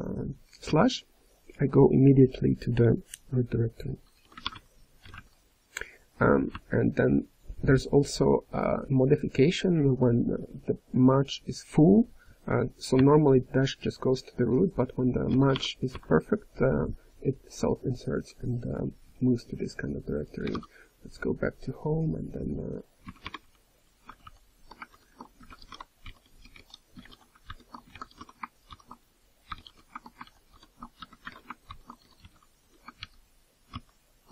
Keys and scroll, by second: 24.0 ctrl+n, 24.8 ctrl+j, 26.0 BackSpace, 27.4 ctrl+j, 28.6 ctrl+j, 30.2 ctrl+n, 30.4 ctrl+j, 32.9 ctrl+n, 33.6 Return.